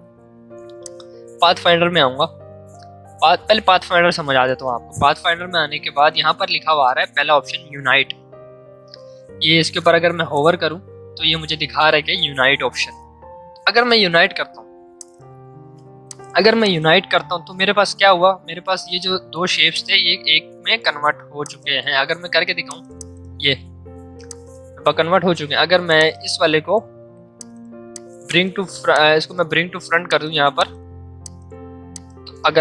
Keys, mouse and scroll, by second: 0.7-12.2 drag, 14.9-18.4 drag, 18.4 ctrl+z, 19.7-21.4 alt+drag, 25.0 ctrl+z, 25.9 click, 26.4 right click, 27.3 click, 28.0 click, 29.0 right click, 30.0 click, 30.6 click, 31.2 click.